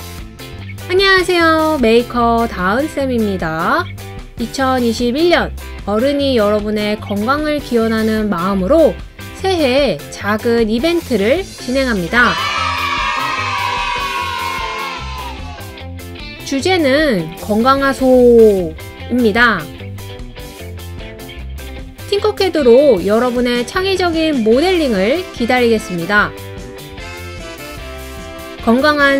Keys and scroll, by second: 8.7-9.2 scroll down 3, 9.2 Page_Down, 9.3 Page_Down, 10.8-12.6 scroll down 6, 13.9 Up, 14.0 Page_Up, 14.0 Page_Up, 14.1 scroll up 5, 14.4 Right, 14.5 Right, 14.6 Right, 14.7 Up, 14.9 Right, 15.3 Left, 15.5 Down, 15.9 super+c, 16.1 super+v, 16.2 super+v, 16.6 Right, 16.8 Right, 16.9 Right, 18.5 Left, 19.8 Up, 25.2 Right.